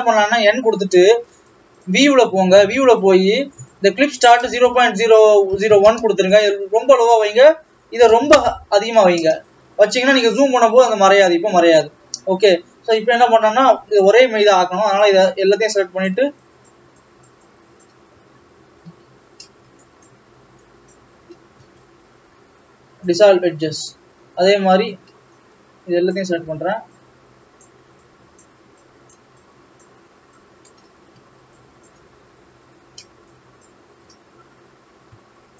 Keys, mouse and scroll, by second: 0.2 n, 1.9 click, 3.4 click, 5.8 KP_0, 10.1 n, 10.8-11.3 scroll up 6, 11.8 scroll down 1, 15.1 click, 16.0 shift+click, 16.7 shift+click, 17.4 shift+click, 17.9 shift+click, 20.3 shift+click, 21.0 shift+click, 23.2 x, 23.4-24.3 scroll down 4, 24.3-26.2 middle drag, 26.2 click, 28.4 shift+click, 29.3 shift+click, 29.8 shift+click, 30.8 shift+click, 32.0 shift+click, 32.2-33.0 scroll up 1, 33.7 shift+click.